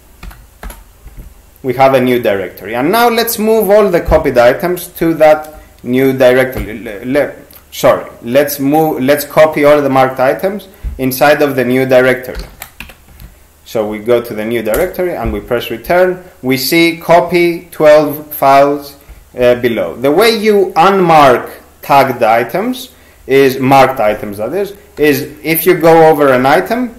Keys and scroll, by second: 0.0-0.2 typing, 0.6 Return, 6.6 shift+c, 12.1-13.3 typing, 14.8 Return, 25.0 n.